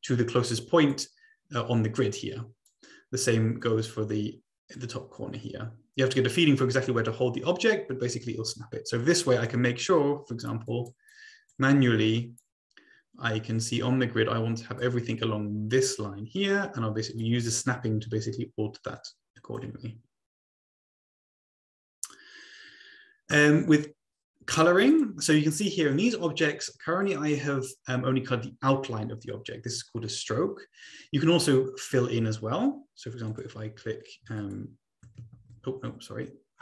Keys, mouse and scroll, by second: 2.6-3.7 drag, 4.2 click, 4.7-9.7 drag, 10.4 click, 10.8 click, 11.2 click, 12.5-15.4 drag, 17.2-19.6 drag, 20.0 click, 24.0-24.5 scroll down 2, 24.5-25.0 scroll down 1, 25.4-25.8 scroll up 2, 26.0 click, 26.9 click, 33.2 click, 34.4 shift+click, 35.3 ctrl+z.